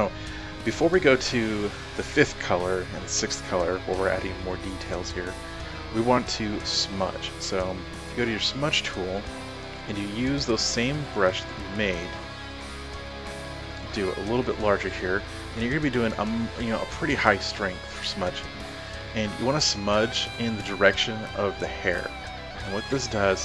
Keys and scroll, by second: 13.9-14.7 typing.